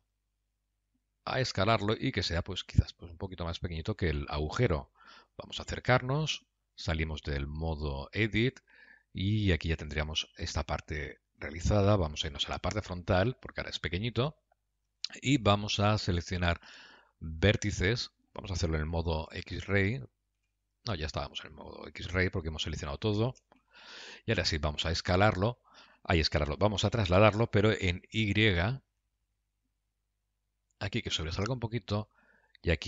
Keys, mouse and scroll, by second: 5.3 KP_Decimal, 6.2-7.1 scroll down 7, 7.0 Tab, 8.6 g, 12.5 KP_3, 13.5-14.0 scroll down 10, 14.3 scroll up 1, 15.2 Tab, 16.7 1, 17.6 click, 19.8 alt+z, 20.8 alt+z, 22.3 middle click, 23.9 KP_3, 25.1 g, 32.4 click.